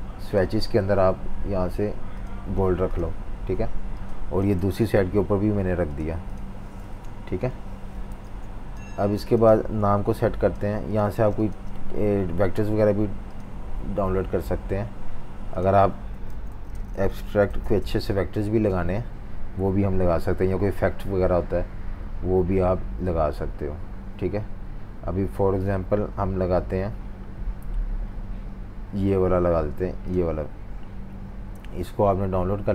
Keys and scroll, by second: 2.6 v, 6.9 super+-, 7.1 super+-, 7.3 super+-, 8.1-9.6 typing, 11.1 v, 18.3 typing.